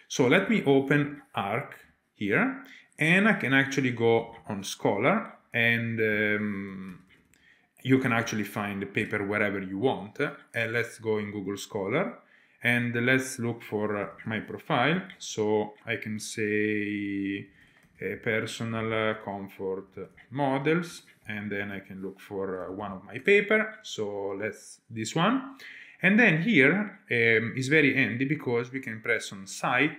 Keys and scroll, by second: 0.4 super+space, 6.4-9.5 typing, 12.5 typing, 13.7-15.7 typing, 17.2-18.4 typing, 21.4-22.2 typing.